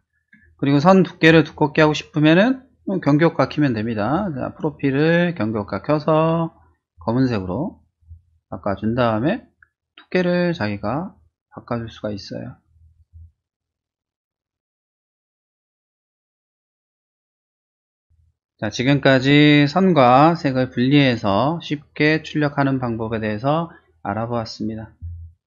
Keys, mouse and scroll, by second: 1.2 click, 4.1 click, 5.4 click, 6.9 click, 7.8 click, 10.3-13.0 drag, 14.6 middle click, 15.6 click, 15.9 click, 16.2 click, 16.5 click, 16.9 click.